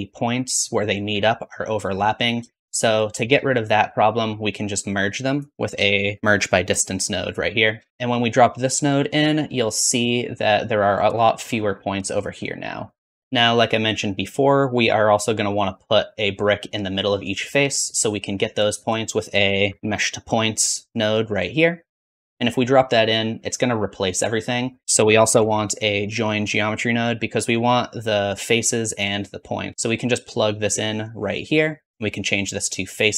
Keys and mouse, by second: 2.4 shift+z, 3.5 shift+z, 3.6 shift+middle click, 5.2 click, 5.6 middle click, 5.9 shift+a, 13.2 click, 13.2 middle click, 13.2 right click, 13.2 shift+z, 19.3-21.8 shift+drag, 19.5 shift+a, 22.4-24.8 drag, 24.8 x, 24.8 shift+a, 25.5-27.1 drag, 28.2-33.1 drag.